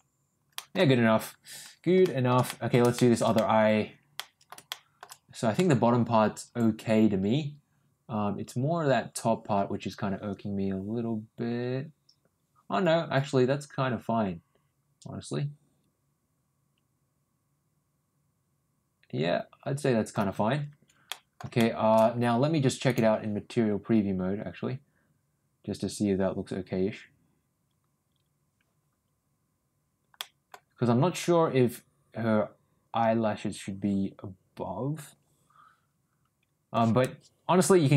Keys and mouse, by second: 0.5 middle click, 2.0 shift+middle click, 2.4 middle click, 2.9 shift+middle click, 3.3 middle click, 4.1 middle click, 4.6 shift+middle click, 5.5-20.1 middle drag, 21.0 middle click, 21.5 shift+middle click, 23.0 click.